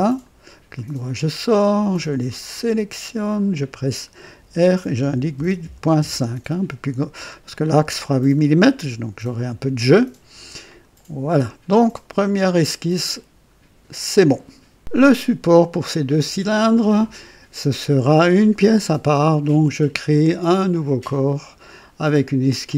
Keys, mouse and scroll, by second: 0.0 click, 0.7 right click, 1.6 click, 3.2 click, 4.4 r, 5.0 KP_8, 5.3 KP_Decimal, 5.6 KP_5, 5.9 Return, 6.2 Return, 10.6 click, 12.2-13.1 right drag, 20.6 click, 22.6 click.